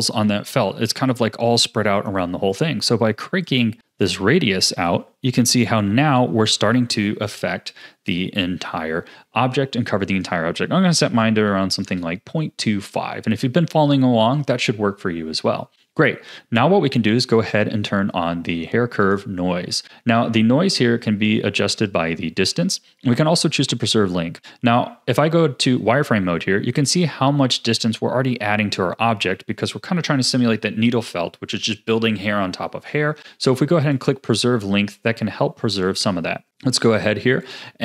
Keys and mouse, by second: 3.5-5.6 drag, 10.3-11.9 drag, 15.7 click, 17.4 click, 19.0 click, 25.2 z, 33.9 click, 35.7 click, 37.4 click.